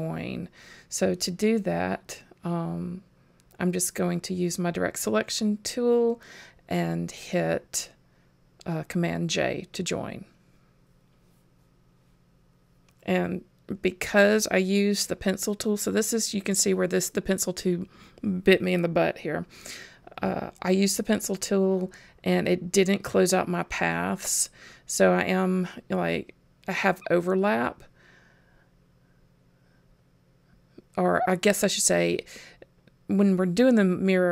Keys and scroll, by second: 5.8 super+j.